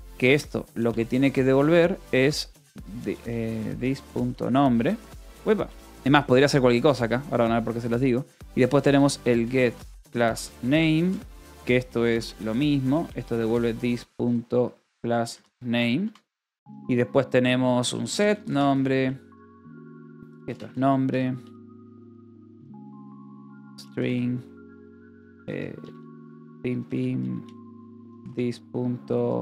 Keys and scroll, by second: 0.0-4.9 typing, 6.1 k, 6.8 a, 7.4 ,, 7.6 Return, 8.4-16.2 typing, 16.4 Return, 17.6-29.4 typing.